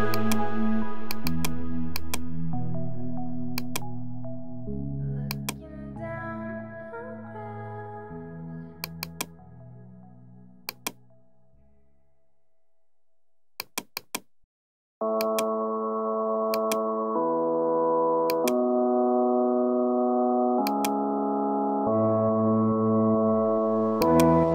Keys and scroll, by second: 1.6 space, 19.2 ctrl+t, 23.2 Return.